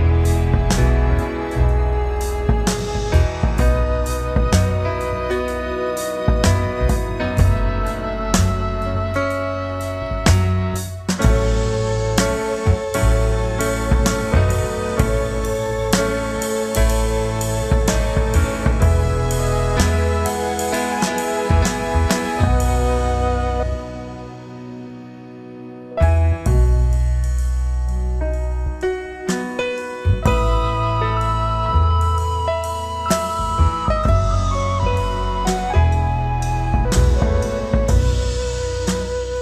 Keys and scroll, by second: 0.0 Return, 1.2 ctrl+m, 2.6 Return, 3.1 ctrl+d, 3.3 space, 4.4 ctrl+b, 5.1 Return, 5.6-7.3 typing, 6.2 alt+i, 8.8 Return, 9.2 space, 10.4 ctrl+space, 11.1 ctrl+w, 11.6 Return, 12.8 alt+space, 13.2 c, 14.4 Return, 15.1 ctrl+KP_Add, 16.0 alt+i, 16.2 alt+a, 16.9 ctrl+space, 17.2 shift+F2, 17.5 ctrl+space, 18.2 w, 19.4 Return, 20.1 shift+F2, 20.6 ctrl+d, 20.8 space, 21.6 ctrl+g, 23.8 Return, 27.5 ctrl+space, 31.2 ], 36.4 space.